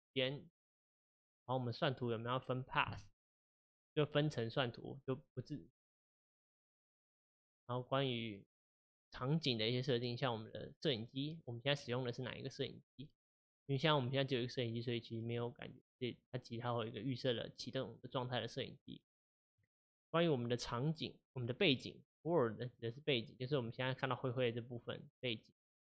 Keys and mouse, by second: 0.8 click, 7.1 click, 11.3 click, 19.5 click, 22.8-25.8 middle drag.